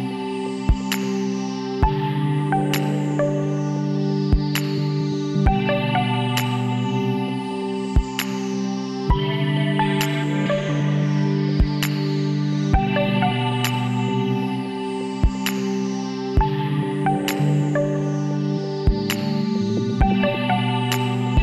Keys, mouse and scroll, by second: 3.0-4.2 middle drag, 4.2 KP_1, 6.1 e, 8.0 ctrl+z, 8.9-10.0 middle drag, 10.0 s, 12.6 i, 15.3 e, 19.2 l, 20.9 e.